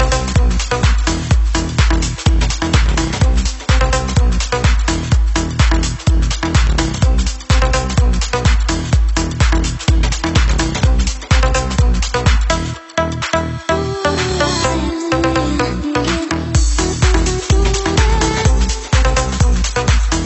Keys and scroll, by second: 9.5-14.0 Right, 17.7-18.4 Down, 18.5 Down, 18.9 Down, 19.9 Up.